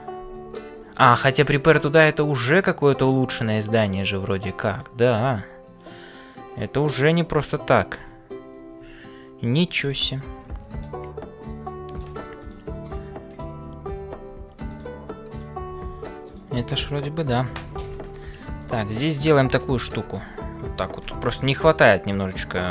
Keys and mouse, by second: 0.0-22.7 typing, 4.8 shift+middle click, 5.3-7.2 middle drag, 10.0 middle click, 11.6 middle click, 12.4 click, 13.0 middle click, 15.3 click, 16.6 middle click.